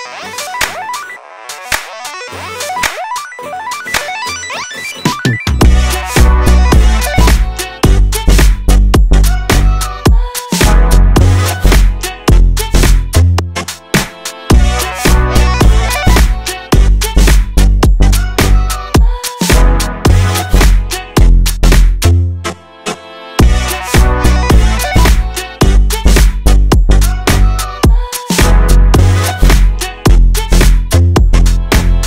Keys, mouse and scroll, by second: 0.5 click, 1.2 click, 2.2 s, 2.8 click, 2.9 scroll down 1, 3.0 middle click, 3.2 scroll up 2, 3.3 middle click, 3.6 a, 3.7 a, 4.0 middle click, 4.6 q, 6.5-8.0 middle drag, 8.0 ctrl+z, 8.7 g, 10.7 middle click, 11.5 Tab, 11.5-14.0 drag, 14.0 middle click, 14.5 click, 14.6-15.0 right drag, 15.1 middle click, 15.8 Tab, 16.0 middle click, 16.3 2, 16.7 middle click, 17.0 shift+click, 17.3 middle click, 17.8 shift+click, 17.9 middle click, 18.3-19.4 shift+drag, 19.4 alt+z, 19.7 middle click, 20.0 alt+z, 20.0 middle click, 20.3 scroll up 2, 20.5 shift+middle click, 21.2 Tab, 21.4 click, 21.8 ctrl+a, 22.1 shift+middle click, 22.4 Tab, 22.8 ctrl+b, 24.5 scroll down 2, 24.6-26.4 middle drag, 26.8 1, 26.9 click, 27.1 middle click, 27.4 g, 28.6 click, 28.8-30.1 shift+middle drag, 30.1 2, 30.4 click, 30.6 shift+click, 30.8 shift+middle click, 31.4 click.